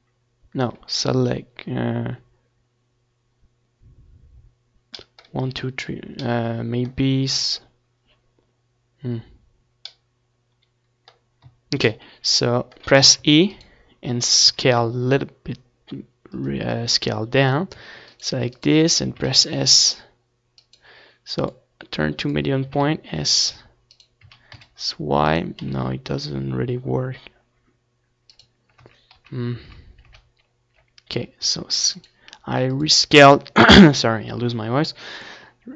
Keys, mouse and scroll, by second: 0.5-3.2 drag, 1.0-3.2 middle drag, 1.0-4.9 right drag, 1.7 a, 3.2 s, 5.5-6.6 middle drag, 7.2 s, 8.4-14.4 right drag, 8.4 s, 9.8 s, 13.0 ctrl+z, 13.4 ctrl+z, 13.8 ctrl+z, 14.2 ctrl+z, 15.7 s, 16.3 right click, 16.9 middle click, 17.1 click, 18.0 click, 18.7 s, 20.7-23.7 drag, 22.2 s, 24.3 s, 27.0 ctrl+z, 27.5 ctrl+z, 31.5 s, 33.5-35.3 drag, 33.5 s, 34.6-35.7 right drag.